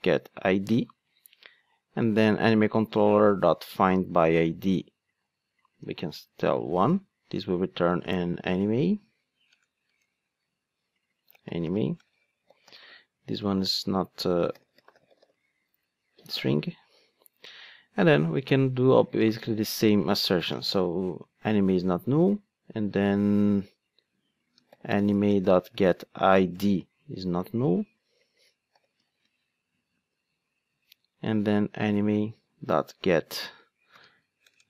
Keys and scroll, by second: 9.5 alt+BackSpace, 26.6 Return.